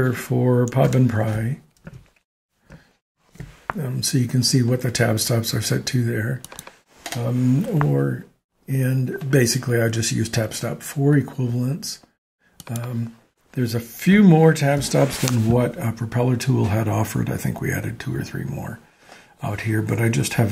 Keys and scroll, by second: 1.2 shift+Tab, 3.1 ctrl+alt+Tab, 7.1 Delete, 14.5 ctrl+alt+Tab.